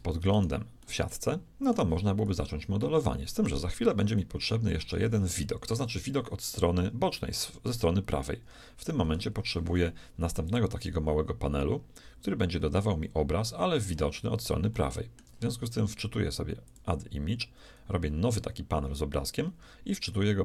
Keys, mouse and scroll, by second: 0.3-2.1 right drag, 0.8 middle click, 2.5 KP_1, 4.3-6.0 shift+middle drag, 7.4 KP_3, 10.5-12.4 drag, 14.7-16.4 middle drag, 16.6-18.7 drag.